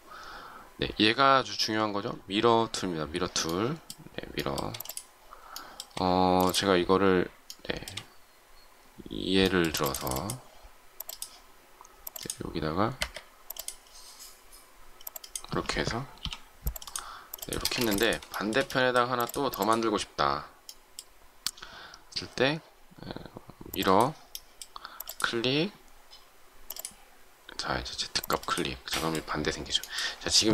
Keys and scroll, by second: 12.9 Escape, 17.5 space, 17.7 Escape.